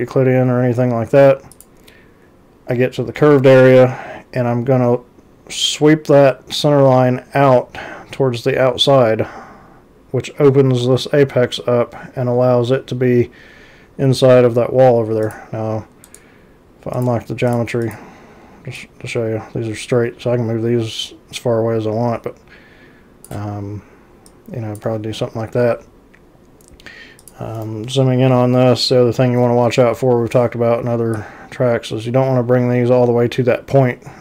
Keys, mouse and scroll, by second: 1.6 click, 15.3 click, 16.1 right click, 17.0 click, 17.5 click, 17.9 click, 18.8-23.3 drag, 24.3 click, 27.3 click, 27.6 ctrl+c, 28.3 z, 31.2-34.2 drag.